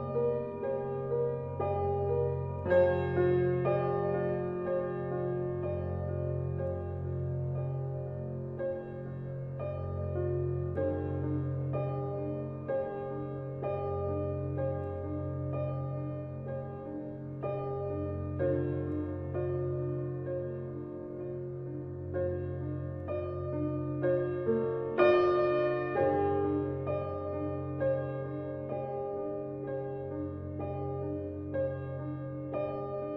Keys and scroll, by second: 13.7 [.